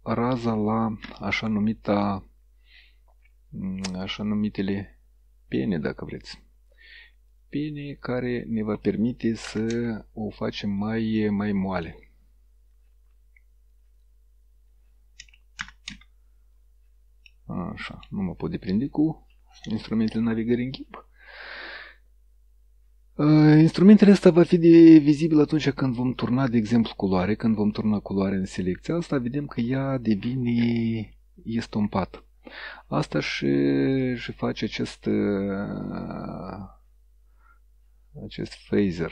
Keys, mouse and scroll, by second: 1.8 ctrl+scroll up 2, 4.8-5.8 shift+middle drag, 7.3 click, 9.5 KP_0, 9.8 KP_Enter, 11.2 shift+middle click, 13.8 click, 15.7 KP_0, 15.9 KP_Enter, 17.3-18.3 middle drag, 26.3 click, 28.4 click, 30.9-31.8 ctrl+scroll down 4, 34.0 click, 34.8 click, 36.1-38.8 drag.